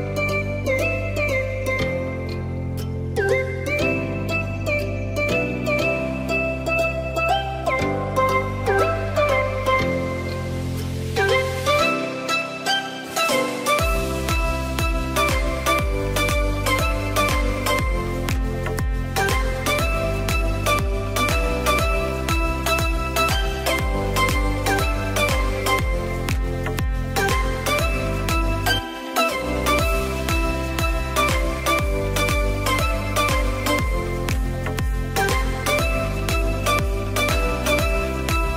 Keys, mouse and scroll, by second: 2.0-4.6 drag, 5.4 KP_3, 5.7 KP_7, 6.8-8.3 shift+middle drag, 8.3-10.9 drag, 13.7 click, 14.0-16.9 middle drag, 16.9 scroll down 1, 17.2-18.2 middle drag, 18.2 click, 18.5 click, 19.6-22.1 drag, 23.1 click, 23.5-26.1 drag, 27.2 click, 30.6 click, 30.9-31.3 scroll down 2, 31.3-32.3 middle drag, 32.3 click, 34.3-35.5 drag, 35.6-36.5 scroll down 3, 36.5-38.5 drag.